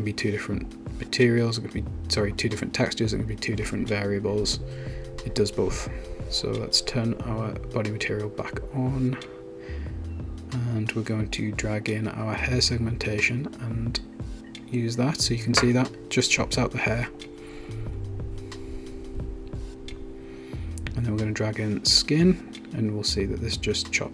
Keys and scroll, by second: 4.9 1, 5.6 Return.